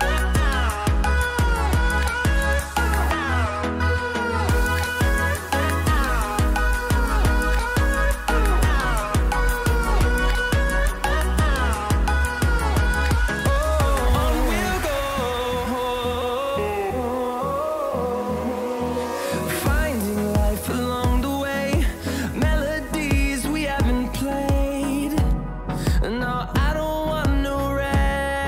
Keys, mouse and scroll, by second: 0.7-3.0 drag, 3.4-6.4 drag, 9.4 Delete, 10.6 click, 11.6 Delete, 14.2 click, 22.0-23.1 scroll up 1, 23.1 click.